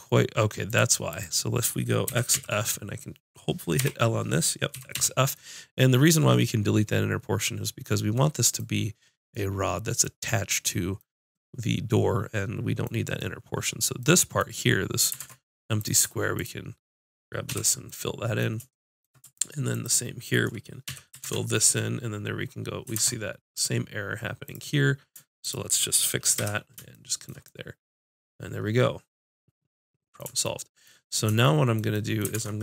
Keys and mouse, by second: 0.7-2.1 drag, 2.1 x, 2.4-3.8 drag, 3.8 l, 4.7 x, 15.2 ctrl+Tab, 15.9 click, 17.5 f, 17.9 click, 19.7 click, 20.9 f, 21.3 ctrl+Tab, 23.0 ctrl+Tab, 24.5-26.5 drag, 26.4 j, 29.2 middle click, 30.5 middle click, 32.4 ctrl+Tab.